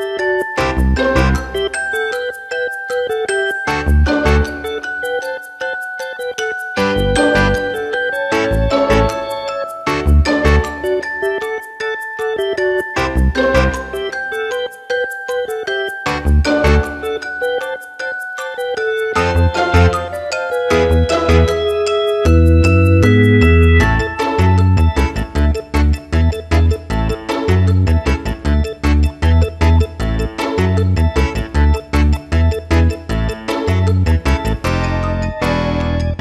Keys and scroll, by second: 1.1 alt+space, 1.5 c, 1.8 Return, 2.4 ctrl+KP_Add, 3.4 alt+i, 3.5 alt+a, 3.9 ctrl+space, 5.3 ctrl+KP_Subtract, 6.0 space, 6.7 w, 8.3 ctrl+alt+d, 8.7 Return, 9.3 shift+F2, 9.7 ctrl+d, 9.9 space, 11.7 Return, 12.4 shift+F2, 12.9 ctrl+space, 13.3 g, 15.5 ctrl+space, 15.9 Return, 19.7 ctrl+KP_Subtract, 20.5 alt+i, 20.8 a, 21.5 s, 24.5 Return, 25.1 alt+space, 29.7 ctrl+space, 32.2 Return, 33.5 c, 34.8 Return, 35.1 ctrl+KP_Add.